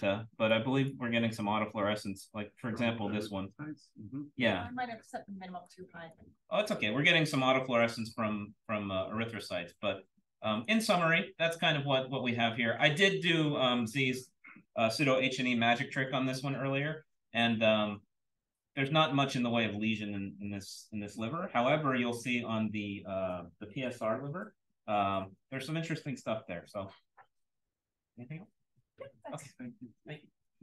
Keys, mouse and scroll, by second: 0.4-0.8 drag, 0.4-1.5 scroll up 1, 1.0-1.5 drag, 1.5-2.9 scroll up 1, 1.8-2.1 drag, 2.9 scroll up 1, 3.1-3.9 scroll down 1, 3.9-5.6 scroll down 1, 5.6-6.0 drag, 5.6-6.3 scroll down 1, 6.3-7.0 scroll up 1, 7.0-8.2 scroll up 1, 8.2-8.7 scroll up 1, 8.7-10.5 scroll up 1, 10.5 click, 11.1 click, 11.6-12.2 scroll down 1, 12.2-13.0 scroll down 1, 13.0-14.5 scroll up 1, 14.5-14.9 scroll up 1, 14.9 click, 15.5-16.0 scroll up 2, 16.0-18.1 scroll down 2, 18.1-20.1 scroll down 1, 20.1-21.5 scroll down 1, 21.5-22.8 scroll down 1, 22.8-23.5 scroll down 1, 23.5-24.7 scroll down 1, 24.7-26.4 scroll down 1, 26.4-30.6 scroll down 1.